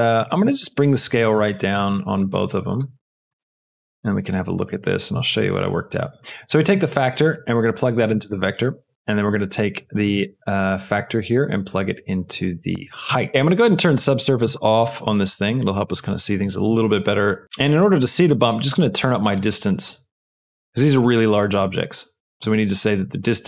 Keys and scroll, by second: 1.0 KP_1, 1.2 Return, 4.3 KP_1, 4.7 Return.